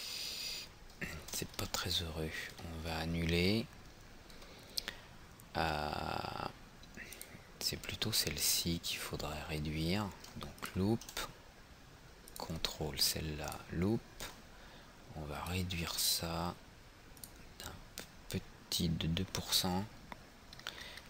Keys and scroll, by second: 2.6 ctrl+z, 3.2 ctrl+z.